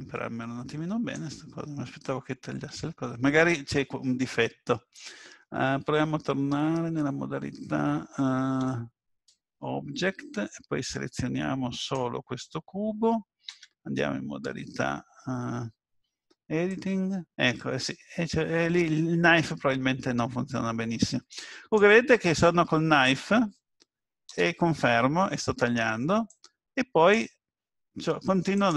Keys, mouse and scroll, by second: 8.5 Tab, 11.8 click, 13.5 Tab, 16.7 click, 26.3 click.